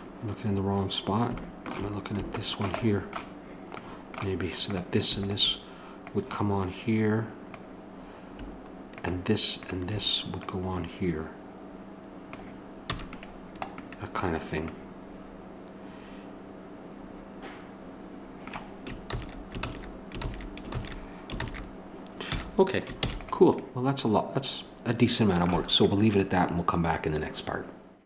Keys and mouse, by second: 4.7-12.3 drag, 12.9 a, 19.0-22.3 ctrl+z, 22.3 a, 22.9 ctrl+s.